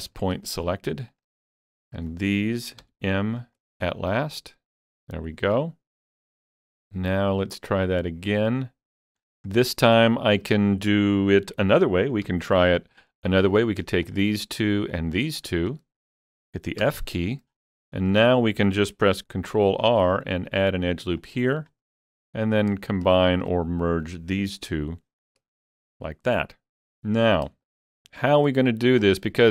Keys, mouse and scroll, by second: 0.2-2.8 shift+middle drag, 0.7 shift+middle click, 1.1 click, 1.7 shift+click, 2.8 m, 3.4 shift+click, 3.8-4.1 scroll down 3, 4.2-9.2 middle drag, 7.1 click, 7.9-9.2 drag, 9.2 scroll down 3, 9.5 middle click, 10.1-12.3 shift+middle drag, 11.6 alt+z, 12.3 KP_3, 13.4 click, 14.1 shift+click, 14.8 shift+click, 15.4 shift+click, 16.8 f, 17.5 scroll up 2, 17.9 shift+middle click, 19.2 ctrl+r, 20.0 click, 21.2 click, 21.7 scroll up 1, 22.5 click, 24.7 m, 25.2 shift+click, 26.7 scroll up 1, 27.2 scroll down 1, 27.3 scroll down 3, 27.6 shift+middle click.